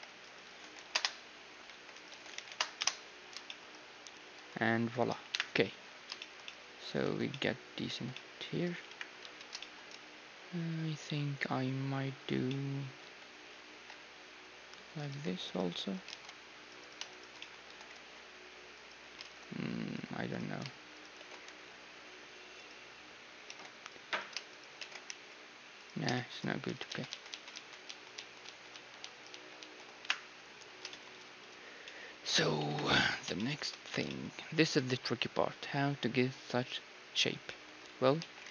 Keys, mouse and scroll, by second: 0.0-2.1 typing, 1.9-3.7 drag, 3.2 middle click, 3.7-8.1 middle drag, 4.3 a, 5.3 KP_1, 5.7 z, 7.1 Tab, 8.1 Tab, 8.9 KP_1, 9.2 z, 12.5-15.0 middle drag, 13.0 z, 13.6 ctrl+r, 15.1 a, 15.4-19.2 right drag, 16.1 ctrl+Tab, 17.4-19.2 middle drag, 17.6 s, 19.2 ctrl+Tab, 20.3-23.5 right drag, 21.2 s, 23.5 ctrl+Tab, 24.1-26.5 right drag, 26.1-28.7 middle drag, 26.1 s, 26.7 ctrl+z, 26.9 ctrl+z, 27.3 ctrl+z, 27.5 ctrl+z, 27.8 ctrl+z, 28.1 ctrl+z, 28.7 ctrl+z, 29.0 ctrl+z, 29.3 ctrl+z, 29.6 ctrl+z, 30.0 KP_1, 30.9-36.8 middle drag, 32.7 KP_1, 34.1 z, 37.5-38.5 middle drag, 38.2 z.